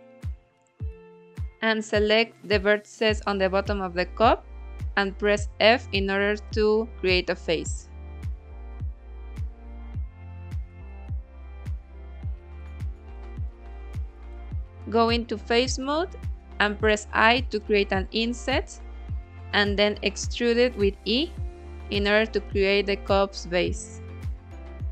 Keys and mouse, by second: 2.6-6.3 middle drag, 8.4 f, 9.4 click, 10.5 KP_1, 11.9 middle click, 12.6 shift+middle click, 13.7 middle click, 14.5 3, 17.4 i, 20.1 click, 21.0 e, 23.5 click, 24.0 s.